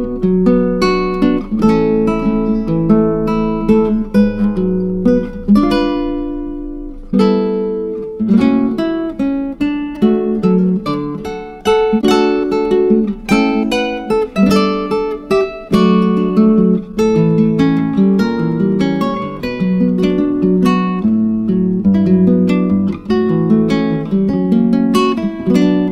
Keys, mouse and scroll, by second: 2.5-3.7 scroll down 4, 3.7 click, 4.8-6.0 drag, 6.0-6.9 scroll down 1, 6.9 click, 11.1 click, 12.3 click, 14.3 m, 17.2-22.4 drag.